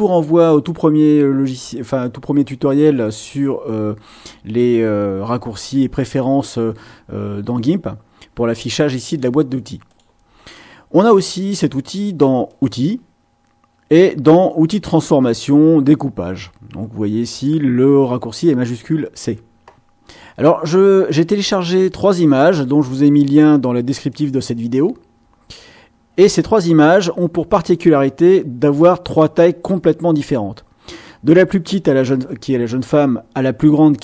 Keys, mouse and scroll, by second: 3.0 click, 9.8 click, 12.4 click, 21.0-23.1 drag, 24.1-26.8 drag, 27.9-29.3 drag.